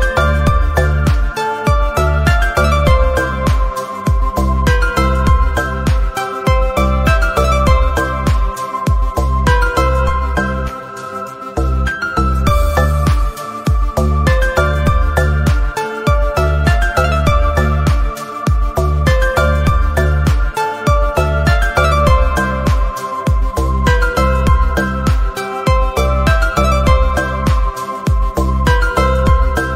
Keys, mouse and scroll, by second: 0.0 middle click, 0.4 n, 0.5 middle click, 0.6 click, 1.4 middle click, 2.0 shift+middle click, 2.4 alt+shift+click, 2.5 middle click, 3.2 alt+shift+click, 3.3 middle click, 7.6-7.9 shift+middle drag, 7.9 t, 8.1 shift+middle click, 8.3-14.4 scroll up 1, 14.4-14.9 scroll up 1, 14.9-15.4 scroll up 1, 15.4 middle click, 15.6 Tab, 16.4 middle click, 16.5-17.5 scroll down 2, 16.6 middle click, 17.5-19.0 scroll down 1, 19.0 scroll down 1, 19.3 middle click, 19.7 alt+click, 20.3-26.3 middle drag, 26.3 Tab, 28.2 middle click, 28.2-29.0 scroll down 1, 29.0-29.7 scroll down 1.